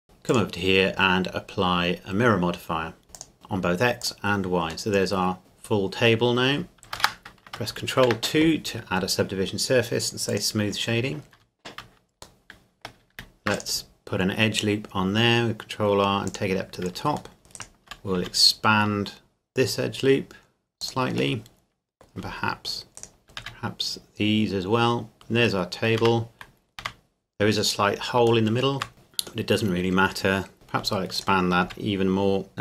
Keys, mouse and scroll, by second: 0.0 click, 3.1 click, 4.9 middle click, 8.0 ctrl+2, 10.3-11.3 drag, 11.3 Tab, 12.4 middle click, 13.1 ctrl+r, 13.5 click, 14.8 click, 16.3 click, 17.4 shift+middle click, 17.5 alt+right click, 18.2 s, 20.8 click, 21.4 middle click, 23.0 alt+right click, 23.4 s, 25.1 middle click, 25.7 scroll up 1, 26.0 Tab, 26.5 scroll up 1, 26.8 Tab, 27.5-27.8 scroll up 1, 28.5 shift+middle click, 28.9-29.5 scroll down 1, 29.5 middle click, 30.5 Tab, 31.1 alt+right click, 31.7 s, 32.5 middle click.